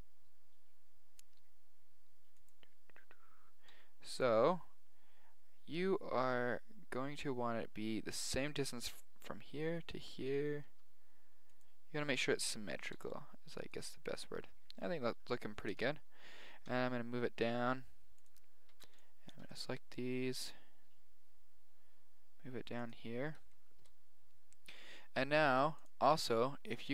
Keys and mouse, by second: 3.6 g, 10.6 g, 12.9 g, 14.2 middle click, 15.7 KP_1, 16.2 middle click, 16.7 g, 18.6 a, 18.8 b, 19.4 g, 23.2-25.5 middle drag.